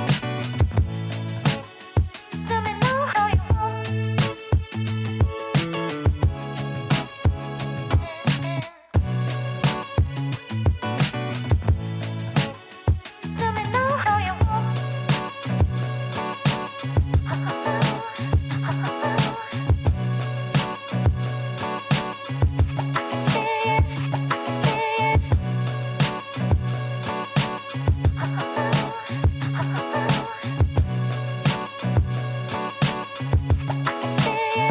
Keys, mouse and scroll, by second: 6.9 r, 12.6 scroll down 4, 15.4 g, 19.1-19.8 scroll up 2, 19.8-22.2 shift+middle drag, 22.2 s, 29.7 scroll down 2, 31.0-32.3 scroll up 5, 32.3-34.0 shift+middle drag, 34.0 Tab.